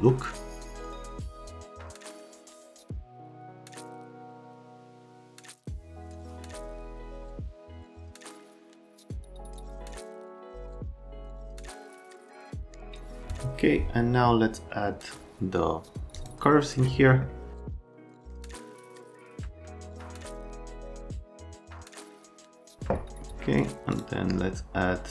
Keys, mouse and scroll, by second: 6.8 middle click, 12.8 click, 16.1 click, 17.8 click, 20.8 click, 21.1 click, 22.2 click, 23.9 click.